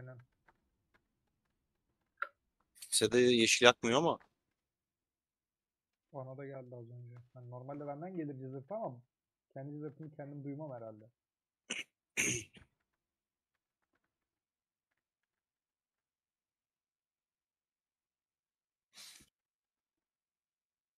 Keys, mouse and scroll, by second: 1.7-2.9 drag, 2.9 /, 3.2 /, 3.6 middle click, 4.0 Tab, 4.2 click, 4.9-8.6 middle drag, 8.6 a, 8.8 /, 9.0-10.8 drag, 10.8 Tab, 12.1 /, 12.7 Tab, 13.2 middle click, 13.6 3, 13.8-16.8 drag, 16.8-19.4 middle drag, 19.4 2, 19.6 alt+click, 20.1-20.9 middle drag.